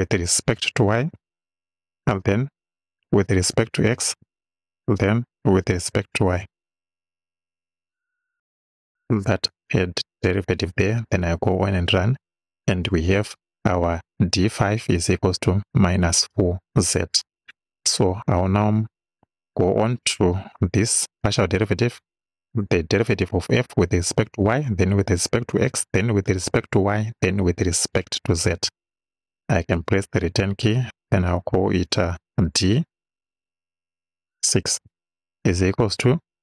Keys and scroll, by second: 1.2 y, 3.6 x, 4.2 ,, 5.9 y, 29.8 Return, 33.6 d, 34.9 6, 35.9 =.